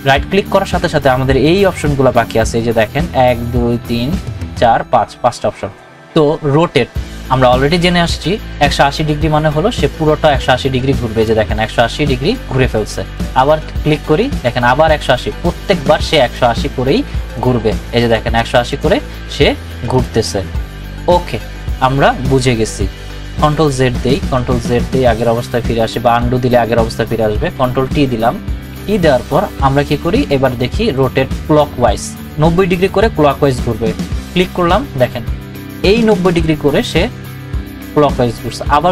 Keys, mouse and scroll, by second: 11.1 right click, 11.1 click, 13.1 right click, 14.2 click, 16.2 right click, 17.3 click, 18.7 right click, 19.9 click, 23.2 ctrl+z, 24.5 ctrl+z, 26.1 click, 27.8 ctrl+t, 29.2 right click, 34.0 click.